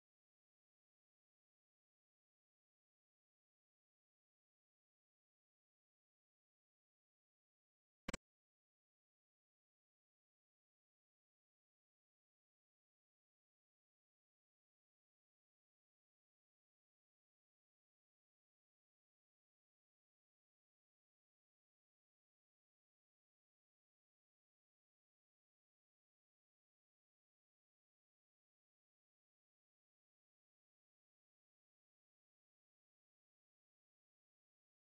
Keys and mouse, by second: 1.8-2.3 drag, 3.0-6.0 middle drag, 8.1 Right, 8.6 Left, 9.7-13.9 drag, 9.7 middle click, 14.2-15.1 ctrl+drag, 14.2 ctrl+middle click, 15.1-16.2 middle drag, 16.3-16.7 shift+middle drag, 21.7-23.0 drag, 24.4 click, 26.3 click, 26.7 click, 28.5-29.4 middle drag, 29.5-30.0 shift+middle drag, 32.3-33.1 ctrl+middle drag.